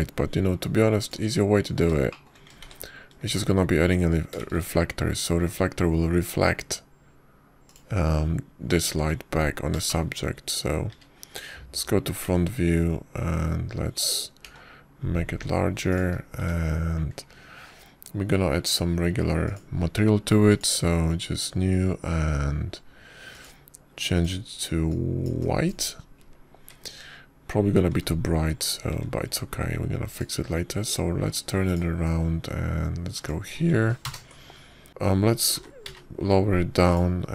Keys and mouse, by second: 0.2 shift+click, 1.1-1.5 drag, 4.5 ctrl+shift+a, 5.2 shift+a, 6.4 shift+a, 12.8 `, 14.1 r, 16.3 s, 18.2 `, 21.3 click, 22.3 click, 25.2 click, 26.0 click, 28.5 `, 29.8 g, 30.8 `, 32.3 r, 35.5-36.6 drag.